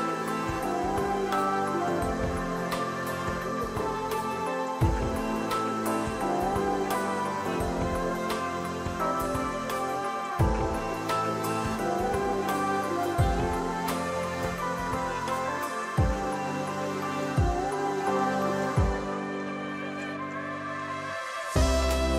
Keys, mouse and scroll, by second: 0.3 shift+click, 0.5 shift+click, 7.4 ctrl+a, 11.6 ctrl+d, 15.0 ctrl+j, 18.7 right click, 21.7 double click.